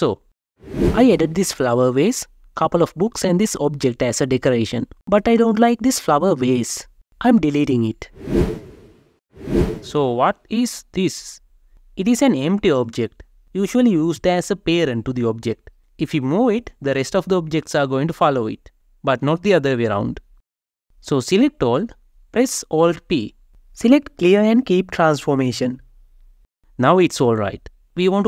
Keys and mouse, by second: 0.6 click, 5.9 click, 7.3 Delete, 8.0 click, 8.4 Delete, 11.2 click, 16.1 g, 16.7 Escape, 20.4-21.0 drag, 22.6 alt+p, 27.6-28.2 drag.